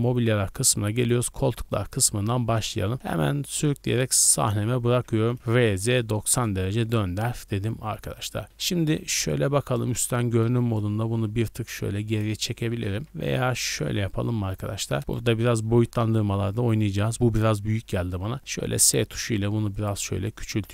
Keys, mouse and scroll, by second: 1.0-1.4 drag, 5.3 r, 5.5 z, 5.7 KP_9, 5.8 KP_0, 5.9 KP_Subtract, 6.3 KP_Enter, 7.8-8.3 middle drag, 8.3 scroll down 2, 8.8 KP_7, 9.3 z, 9.9 shift+middle drag, 10.1-10.6 scroll up 2, 10.6-11.0 shift+middle drag, 11.0 g, 11.2 x, 12.1 click, 12.5-12.9 middle drag, 12.9 z, 13.3-14.5 middle drag, 14.5 click, 15.0 scroll up 1, 15.0 KP_0, 15.5 z, 17.1 scroll up 1, 18.1 s, 19.7-20.7 drag.